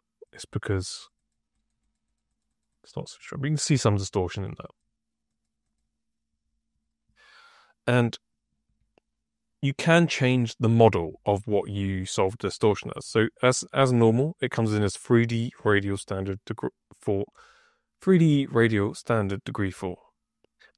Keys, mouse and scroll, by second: 0.1 click, 0.7 click, 0.8 click, 1.1 click, 1.5 click, 1.7 click, 2.0 click, 2.2 click, 2.4 click, 2.6 click, 2.9 click, 3.2 click, 3.5 click, 3.8 click, 4.2 click, 4.5 click, 5.2 click, 5.5 click, 8.2 click, 16.2-17.2 drag.